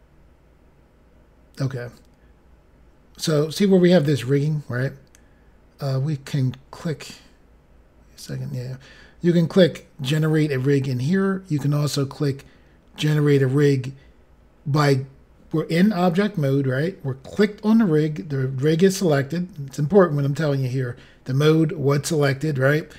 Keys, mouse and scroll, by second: 7.0-7.7 scroll down 5, 8.6 scroll up 3.